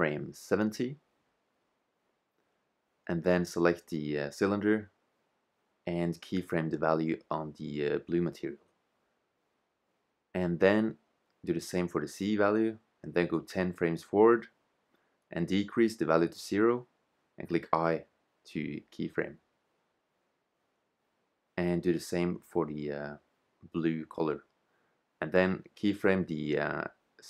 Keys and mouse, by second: 4.1-6.1 right drag, 5.5-7.3 drag, 7.6 i, 9.7 right click, 10.0 click, 10.4 i, 11.6-12.6 drag, 14.0 shift+z, 17.8 i, 19.0 click, 20.1-21.1 drag, 21.3 i, 23.4 shift+z, 25.2 i, 25.9-27.1 drag.